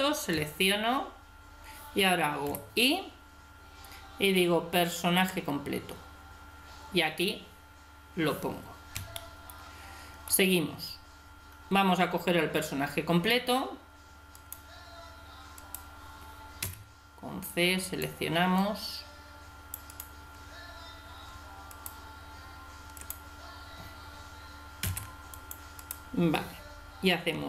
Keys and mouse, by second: 0.3 a, 0.6 a, 2.5 i, 9.1-11.0 drag, 14.4-17.2 right drag, 16.6 c, 24.8 middle click, 24.8 c, 27.3 g.